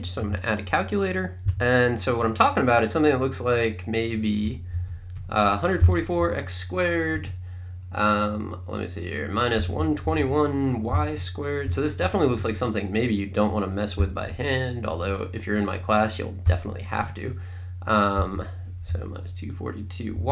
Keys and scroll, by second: 4.2-6.2 typing, 7.2 Right, 9.3-12.0 typing, 12.4 Right, 14.3 1, 14.9 4, 16.5-20.2 typing.